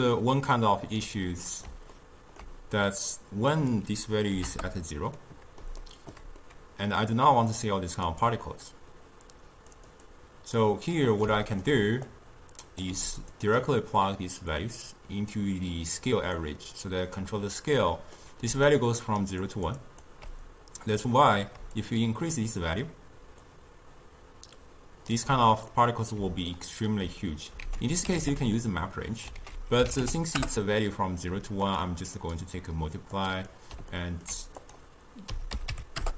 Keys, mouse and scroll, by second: 3.6-5.2 drag, 5.2-6.4 middle drag, 6.4 scroll up 2, 6.5 middle click, 7.1-8.1 scroll up 2, 8.1 click, 9.8 click, 10.1 click, 11.0-12.2 middle drag, 12.2-13.0 drag, 13.0 g, 13.6 click, 14.6 drag, 17.8 middle click, 18.6-21.0 typing, 18.7 click, 19.5 click, 19.9 click, 21.8-24.8 shift+drag, 25.8-27.7 middle drag, 27.7 ctrl+a, 32.2-33.6 drag, 33.6-34.7 middle drag, 34.7-36.1 drag.